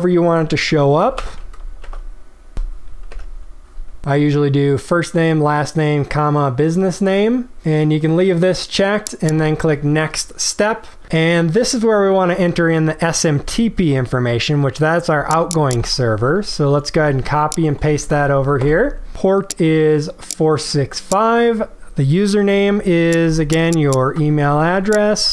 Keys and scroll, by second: 1.2 space, 16.9 ctrl+c, 18.0 ctrl+v, 24.3 ctrl+c.